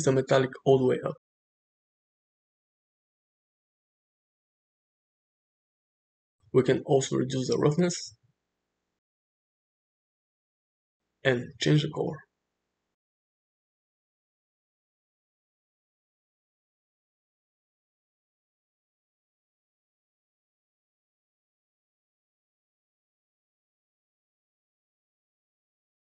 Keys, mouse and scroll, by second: 0.4-1.8 drag, 2.3-3.7 middle drag, 4.3 space, 6.0 space, 7.7-9.6 drag, 10.1-11.9 middle drag, 12.8 click, 18.8 drag, 19.1-21.5 middle drag, 21.8 shift+middle click, 22.1-24.1 middle drag, 25.2-26.0 middle drag.